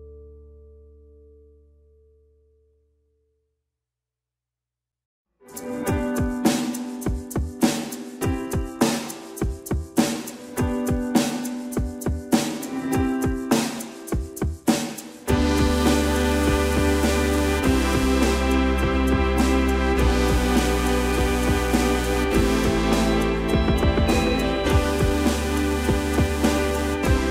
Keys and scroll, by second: 0.6 shift+space, 0.6 Escape, 1.7 shift+q, 3.1-4.1 typing, 7.2-8.1 typing, 9.1 m, 26.9 shift+space.